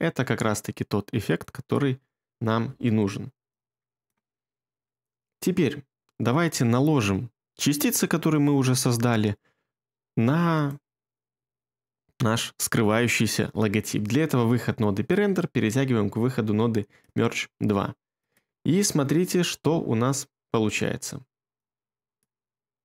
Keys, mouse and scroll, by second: 19.6 2.